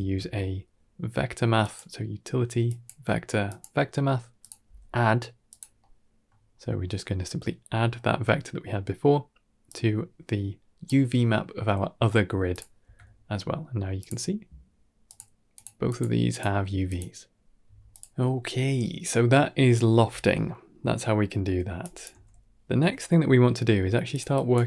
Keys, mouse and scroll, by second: 4.5 g, 5.7 middle click, 6.3-6.7 scroll down 2, 6.7 middle click, 7.6 middle click, 8.0-8.4 scroll up 3, 9.5-10.7 drag, 11.8 middle click, 12.4 click, 12.7 Tab, 13.8 click, 14.9 click, 15.4 click, 16.2 click, 16.7 click, 19.8 scroll down 2, 20.2 middle drag, 20.6 scroll down 2, 20.8 middle click, 21.2 scroll down 2, 21.7-22.0 drag, 22.0 g, 22.7 g, 24.2 drag, 24.5 g.